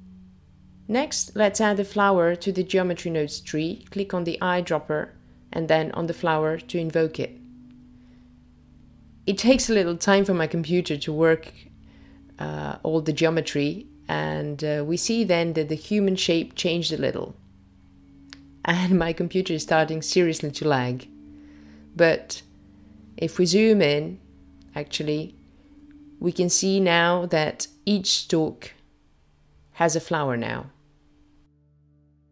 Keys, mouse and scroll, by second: 4.4 click.